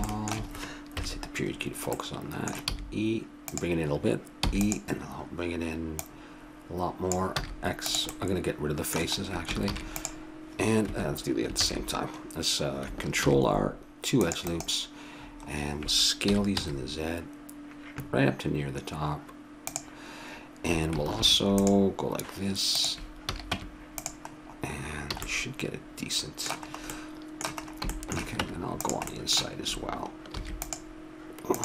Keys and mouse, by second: 0.9 KP_Decimal, 2.6 e, 4.4 e, 7.4 x, 8.1 middle click, 9.6 ctrl+r, 11.6 ctrl+z, 12.3-14.2 middle drag, 13.2 ctrl+r, 15.1 middle click, 16.2 s, 21.2 ctrl+r, 23.3 a, 23.5 Tab, 25.1 a, 28.5 Tab, 30.3 ctrl+r.